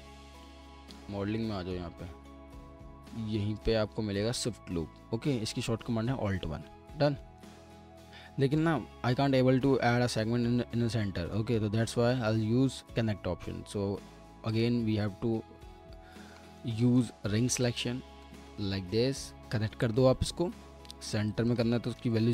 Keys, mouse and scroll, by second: 6.7 alt+middle click, 6.7 alt+middle click, 13.3-15.0 typing, 16.1 typing, 16.4 alt+middle click, 22.0 0.